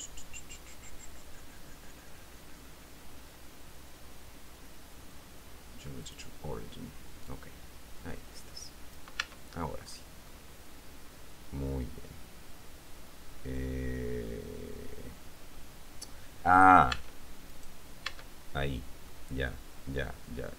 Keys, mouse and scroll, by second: 6.2 click, 7.4-9.3 drag, 9.4 Tab, 10.5-17.2 middle drag, 17.2 Tab, 17.7 right click, 18.3 Tab, 19.3-20.5 middle drag.